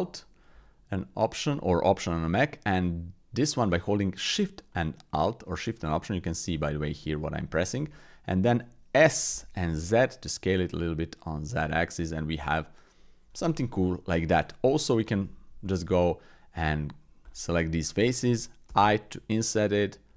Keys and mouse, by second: 4.7 alt+shift+click, 5.9 alt+shift+middle click, 6.6 alt+shift+click, 7.3 alt+shift+click, 7.9 click, 9.3 s, 11.7 click, 13.6 click, 14.2 shift+click, 15.1 Tab, 17.2 alt+click.